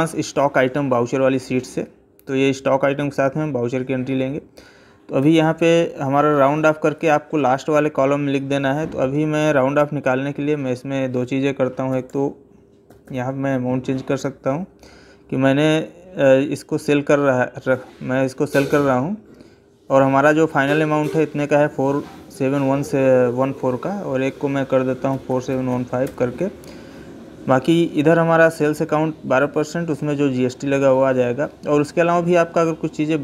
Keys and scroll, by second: 5.0 Left, 13.9 Down.